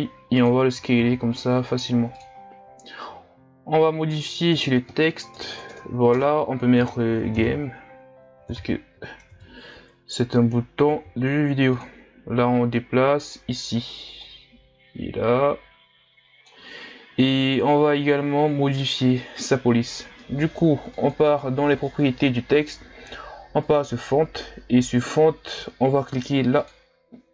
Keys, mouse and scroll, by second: 0.9 s, 4.4 Tab, 5.4 BackSpace, 5.5 BackSpace, 6.1 BackSpace, 7.3 g, 7.5 a, 8.5 m, 9.3 Tab, 10.9 s, 13.2-18.3 drag, 21.0-24.0 drag, 24.0-26.6 scroll down 3, 26.6 click.